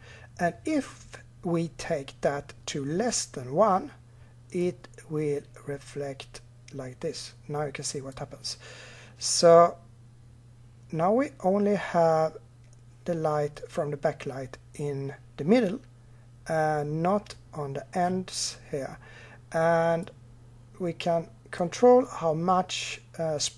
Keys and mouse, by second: 4.4-6.2 drag, 19.8-23.5 drag.